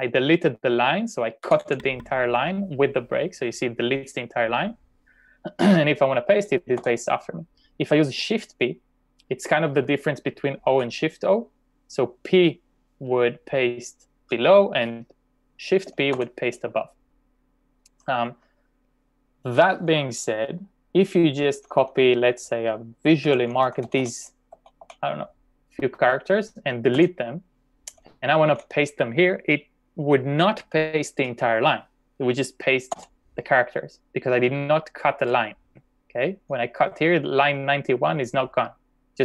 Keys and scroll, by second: 1.5 typing, 6.7 k, 16.2 shift+p, 21.5 typing, 23.3-25.2 typing, 27.0 d, 28.4 j, 33.0 p, 36.5 k.